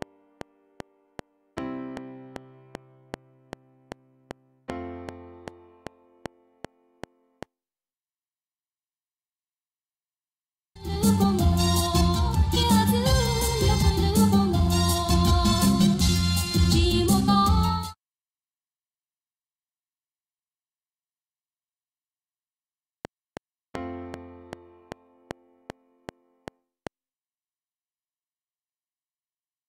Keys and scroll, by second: 7.6 space, 10.1 Tab, 10.7 ctrl+space, 12.0 ctrl+shift+Left, 17.6 space, 18.2 Tab, 22.9 F7, 26.9 space, 27.5 Right, 28.2 Tab.